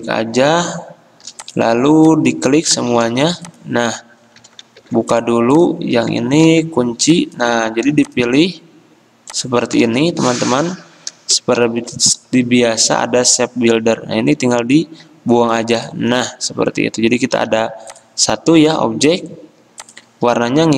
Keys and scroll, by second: 0.0 v, 4.3 ctrl+z, 5.0 ctrl+alt+2, 6.7 ctrl+2, 7.8 ctrl+z, 11.8 m, 17.6 v.